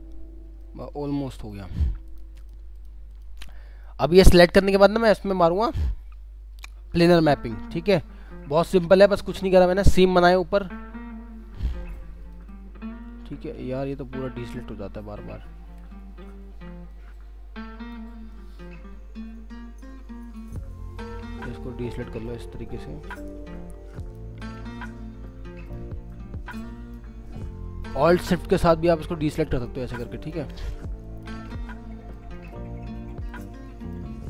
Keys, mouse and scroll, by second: 0.3-0.6 scroll down 1, 0.6 alt+middle click, 1.7 scroll up 1, 2.1 ctrl+click, 2.4 ctrl+double click, 2.7 ctrl+click, 3.5 scroll down 1, 3.8 alt+middle click, 4.8 alt+scroll up 2, 5.2 middle click, 8.4 alt+w, 10.3 middle click, 10.8-11.6 scroll up 1, 11.8 alt+click, 13.1 alt+scroll down 1, 13.4 alt+w, 15.6 alt+w, 16.0 scroll, 16.0 scroll down 1, 16.9 alt+click, 18.3 alt+click, 21.0 alt+click, 22.7 alt+click, 24.5 alt+click, 26.1 alt+click, 28.7 alt+shift+click, 31.8 alt+shift+click.